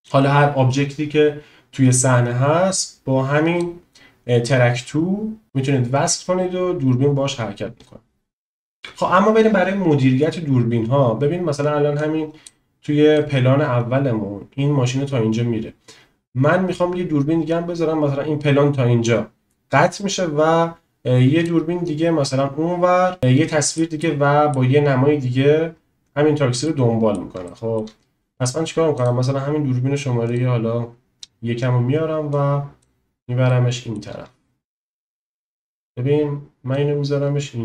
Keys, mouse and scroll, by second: 5.4-8.3 drag, 12.0-12.5 drag, 13.2-14.9 drag, 16.2-16.8 drag, 23.3-23.8 shift+middle drag, 24.0-24.5 middle drag, 26.6 middle click, 27.4 shift+middle click, 28.9 click, 30.3 click, 32.4 click, 32.7-33.1 drag, 33.6-34.0 shift+middle drag, 35.0 click, 36.9 click.